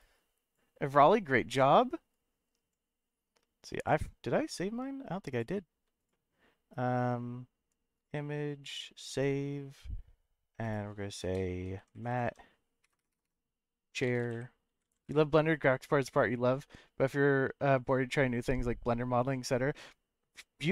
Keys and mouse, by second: 3.8 click, 5.5 click.